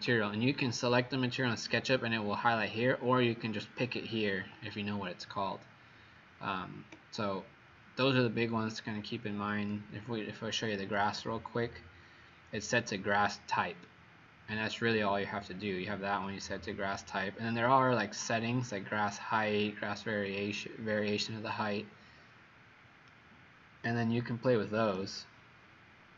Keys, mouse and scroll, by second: 7.0 click, 23.0 right click, 24.3 right click.